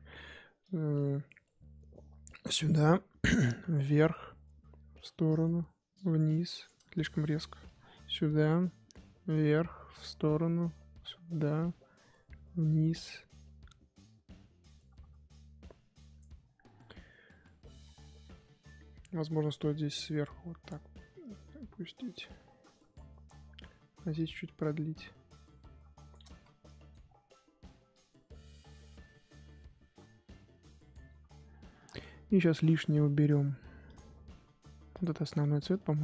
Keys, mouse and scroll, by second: 1.7-6.9 drag, 6.9 ctrl+z, 7.8-17.8 drag, 17.8-18.6 scroll down 9, 18.6-20.1 scroll up 6, 20.2-23.4 drag, 23.4-24.6 scroll up 2, 24.6-26.3 drag, 26.3 ctrl+z, 26.9 click, 27.0-27.3 scroll down 1, 27.3-28.4 scroll up 1, 28.4-30.9 drag, 35.0 click, 35.7 click.